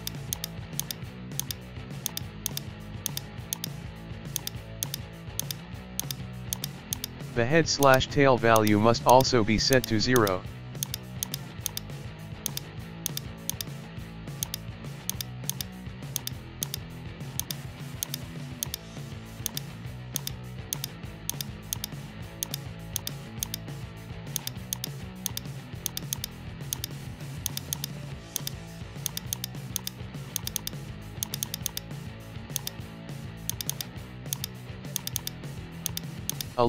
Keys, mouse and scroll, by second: 0.3-1.4 drag, 1.4 right click, 2.0 click, 2.4 click, 3.6 right click, 4.3 click, 4.8-6.0 drag, 6.0 right click, 6.5-7.9 drag, 7.9 right click, 8.6 click, 9.1-9.8 drag, 10.2 right click, 10.8 drag, 11.2-12.5 drag, 12.5 right click, 13.1-14.5 drag, 14.5 right click, 15.1 click, 15.5-16.2 drag, 16.7 right click, 17.4 drag, 18.0-19.5 drag, 19.5 right click, 20.1 drag, 20.7-21.3 drag, 21.8 right click, 22.4 click, 23.0-24.8 drag, 25.3 right click, 25.8 click, 26.8 right click, 27.5 click, 28.4 right click, 29.1 click, 29.8 right click, 30.3 click, 31.2 click, 31.4 click, 32.6 right click, 33.5 click, 34.4 right click, 34.9 click, 35.9 right click, 36.3-36.6 drag.